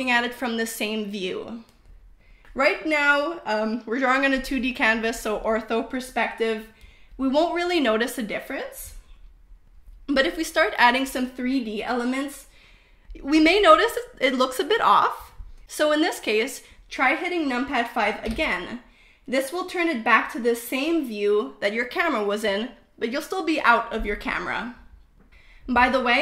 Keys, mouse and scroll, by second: 3.0 KP_0, 15.2 KP_5, 18.0 KP_5, 20.1 KP_0, 21.3 KP_5, 22.4 KP_5.